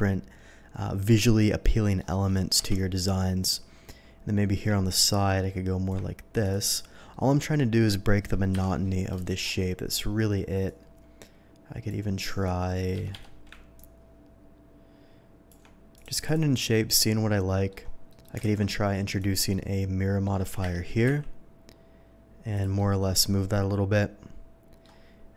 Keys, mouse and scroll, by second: 1.6-2.0 middle drag, 4.9-5.9 ctrl+drag, 6.3 ctrl+click, 6.5 ctrl+click, 6.7 ctrl+click, 7.1-7.9 ctrl+middle drag, 8.5 KP_7, 9.2 shift+middle drag, 10.6-11.8 shift+drag, 12.9 Escape, 13.1 Escape, 13.7-15.5 ctrl+drag, 15.9 ctrl+click, 16.1 ctrl+click, 16.2 ctrl+click, 16.7-17.7 ctrl+middle drag, 18.1 ctrl+middle click, 18.5 alt+x, 19.0 click, 19.5-20.2 middle drag, 20.4 g, 20.6 y, 21.0 x, 22.5 click, 22.7-24.1 middle drag, 24.3-24.8 middle drag.